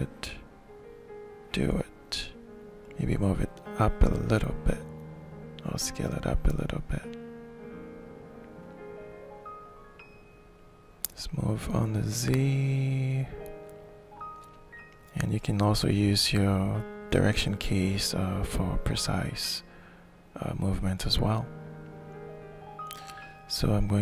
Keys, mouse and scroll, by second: 2.3-4.6 shift+middle drag, 4.6-5.7 drag, 6.4-8.8 shift+middle drag, 9.8-13.5 drag, 13.5-15.3 middle drag, 15.5 middle click, 16.2-20.3 alt+shift+drag, 21.7 click, 22.8 alt+shift+middle click.